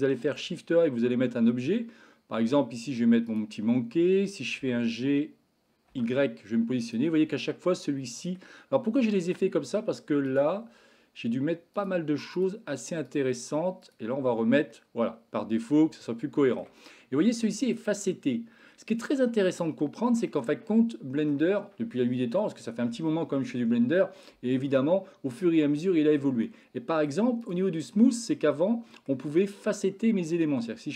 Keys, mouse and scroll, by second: 0.2 shift+a, 4.6 g, 7.3-7.7 shift+middle drag, 7.8-8.3 middle drag, 10.7-14.6 drag, 14.7-15.8 middle drag, 16.1-16.7 shift+middle drag, 17.5-17.8 shift+middle drag, 19.6-20.1 shift+middle drag, 20.3-21.2 middle drag, 26.4-27.2 middle drag, 28.1-29.1 middle drag.